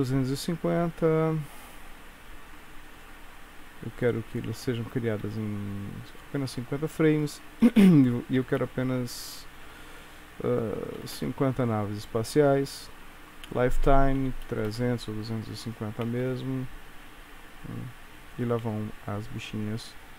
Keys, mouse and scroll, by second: 3.0 click, 7.3 click, 13.6 click, 14.6 KP_0, 16.2 space.